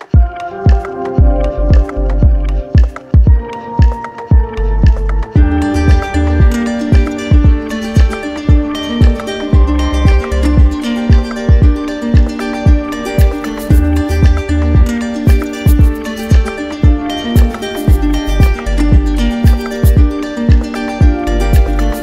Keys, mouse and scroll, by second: 0.1 click, 0.5 click, 1.6 click, 2.1 alt+click, 2.7 click, 4.3 click, 6.7 click, 8.1 click, 9.7 click, 11.2 alt+click, 13.5 alt+click, 14.3 click, 15.8-19.8 alt+drag, 15.9 ctrl+z, 20.3 click, 20.8 shift+click, 21.5 shift+click.